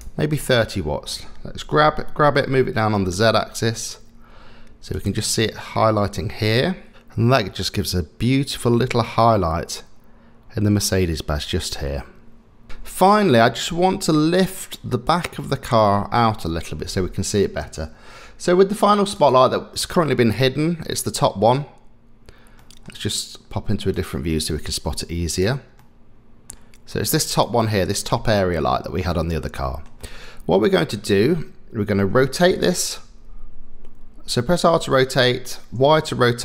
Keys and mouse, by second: 1.7 g, 19.1 click, 20.0 middle click, 20.9 middle click, 22.6 middle click, 24.0 click, 25.4 click, 25.8 middle click, 27.4 click, 28.1-29.8 middle drag, 30.0-32.0 middle drag, 32.5 r.